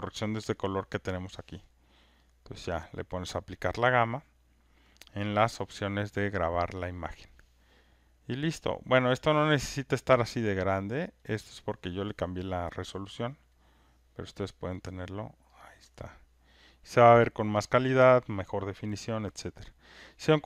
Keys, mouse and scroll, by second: 2.3 click, 4.8 click, 6.4 click, 8.8 click, 10.0 click, 13.0 click, 14.4 click, 16.3 click, 17.7 click.